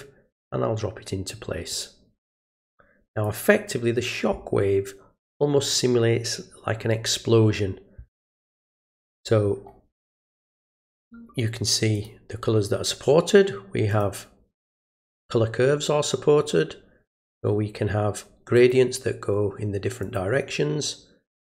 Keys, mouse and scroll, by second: 1.7-3.2 drag, 10.9 click, 11.9 click, 13.9 click, 14.5 click, 18.6 click, 20.0 click.